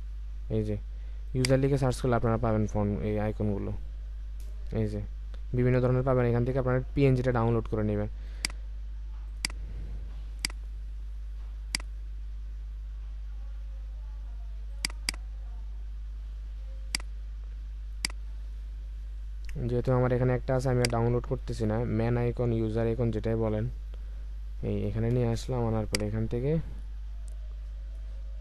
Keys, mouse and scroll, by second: 4.2-5.1 scroll down 1, 5.1 typing, 14.8 double click, 22.8 Right, 23.4 Up.